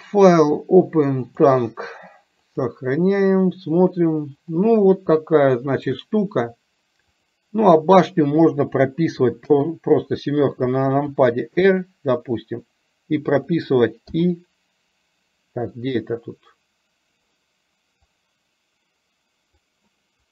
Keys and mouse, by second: 4.9-6.1 middle drag, 9.5 KP_7, 11.2 r, 16.3-20.3 drag.